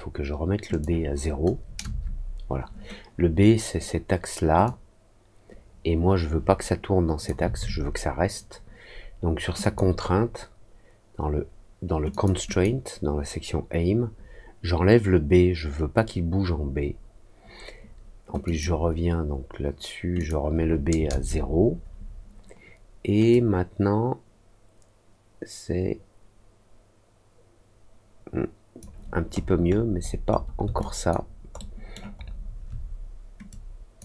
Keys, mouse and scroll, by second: 0.6 click, 4.6-7.2 drag, 9.5 click, 12.0 click, 12.4 click, 18.4 click, 20.1 click, 23.2-28.7 drag, 29.3-30.4 scroll down 4, 30.7 alt+click, 31.5 alt+middle click, 32.1 alt+scroll down 1, 33.4 click.